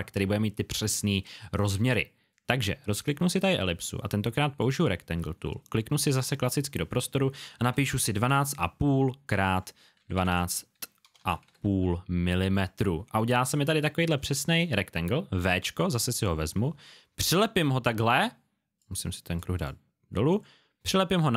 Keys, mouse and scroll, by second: 0.1 click, 3.0 click, 7.5 KP_1, 8.2 KP_5, 9.4 click, 9.9 KP_1, 11.0 BackSpace, 11.4 KP_5, 12.5 click, 13.7 alt+scroll up 1, 15.3 v, 16.1 click.